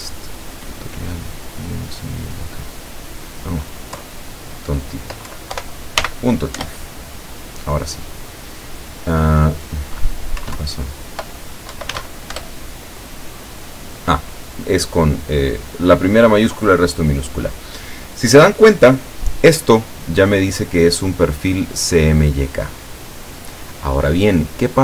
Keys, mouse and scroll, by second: 4.0 Left, 5.6 Delete, 6.0 ., 6.6 Return, 10.5 Up, 10.6 Left, 11.8 Right, 11.9 s, 12.0 Delete, 12.4 Return.